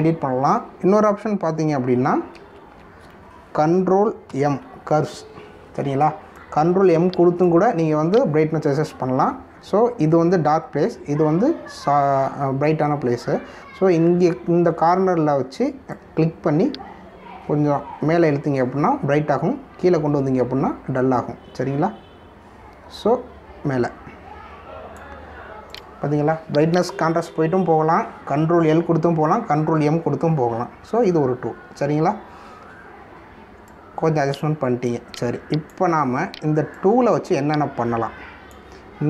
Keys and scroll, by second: 3.4 ctrl+alt+z, 5.3 ctrl+m.